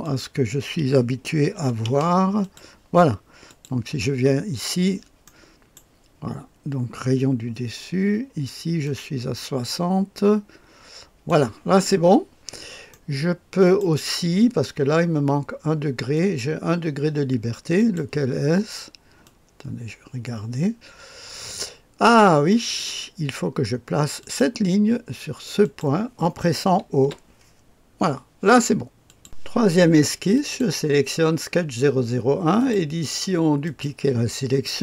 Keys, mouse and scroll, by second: 0.0 click, 1.5 KP_6, 1.8 KP_0, 2.4 click, 3.4 click, 4.8-5.2 scroll up 1, 5.2 click, 8.8-11.3 drag, 12.9-14.0 middle drag, 16.1 click, 17.7 click, 19.2-22.8 drag, 24.2 click, 25.6 click, 27.0 o, 29.0 click, 30.3 click, 32.5 click, 33.6 click.